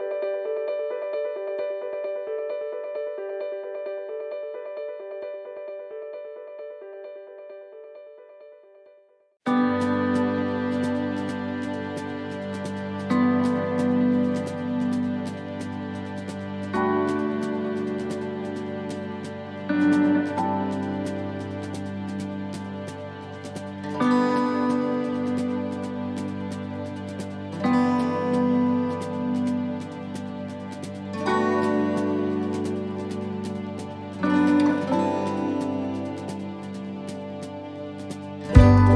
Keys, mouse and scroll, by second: 0.8 click, 8.7 click, 8.7 middle click, 10.7 click, 11.8 middle click, 12.3 shift+middle click, 12.6-13.0 shift+scroll up 5, 13.0 middle click, 13.7 middle click, 14.6 shift+middle click, 15.2 shift+middle click, 15.2-15.5 scroll up 1, 15.5 middle click, 16.1 shift+middle click, 17.9 click, 18.8-19.1 scroll down 1, 19.9 click, 23.5 click, 23.5 middle click, 24.2-24.7 scroll down 2, 25.7 e, 28.1 middle click, 30.6 click, 32.1 middle click, 34.3 click, 35.4 middle click, 36.5 scroll down 2, 37.6 click.